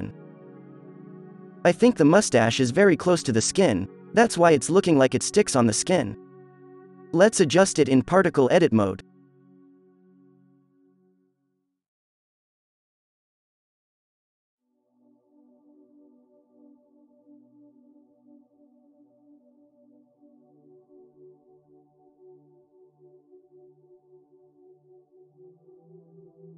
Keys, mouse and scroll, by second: 2.0 z, 2.9-4.9 drag, 5.2 click, 6.0 f, 6.6 f, 7.4-8.0 middle drag, 7.4 f, 9.6 f, 10.9 click, 13.7 ctrl+z, 14.0 f, 16.5 f, 17.3 f, 18.4 f, 19.1 click, 19.8 n, 21.8 f, 23.0 f, 24.2 f, 25.8 f, 26.4 f.